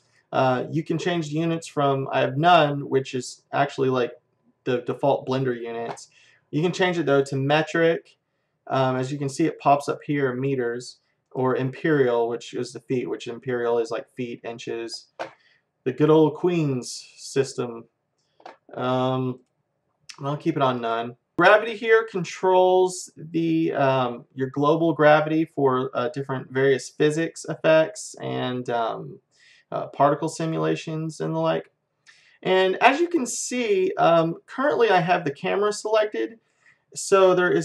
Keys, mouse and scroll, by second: 4.1-6.2 middle drag, 6.3 middle click, 7.3-9.2 drag, 11.3-13.0 drag, 18.9-22.6 drag, 32.1-34.0 drag.